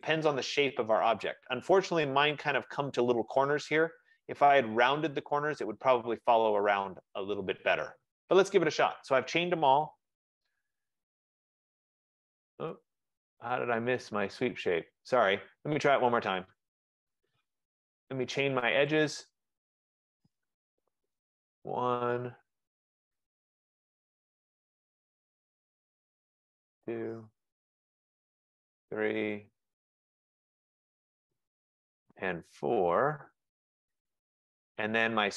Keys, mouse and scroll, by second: 0.1 click, 1.4 click, 3.7 middle click, 3.9 middle click, 4.7 middle click, 5.3 middle click, 5.8 click, 7.0 click, 8.1 middle click, 8.5 middle click, 10.0 Return, 15.8 middle click, 16.4 middle click, 16.8 right click, 17.6 F15, 19.1 click, 21.4 click, 23.1 click, 25.9 click, 26.7 click, 28.2 click, 29.1 click, 31.2 click.